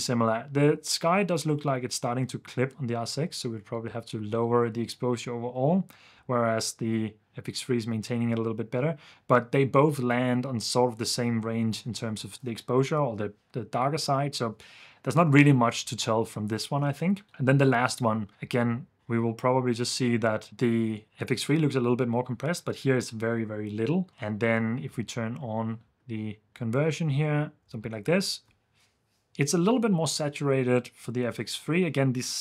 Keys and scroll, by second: 15.9 super+f, 16.8 super+f, 17.2 super+s, 24.9 super+d, 27.6 super+s, 28.0 super+f.